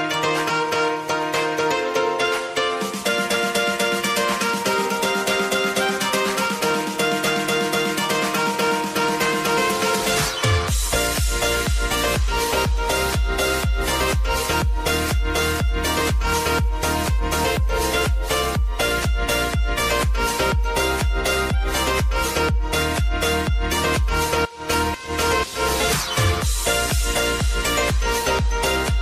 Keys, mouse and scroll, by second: 0.1 space, 1.8 click, 2.4 j, 2.7 space, 5.6-6.7 typing, 6.8-8.1 drag, 8.6 space, 11.9 space, 13.1-15.9 drag, 15.9 -, 16.1 space, 17.8-22.6 drag, 22.8 space, 27.5-29.0 drag.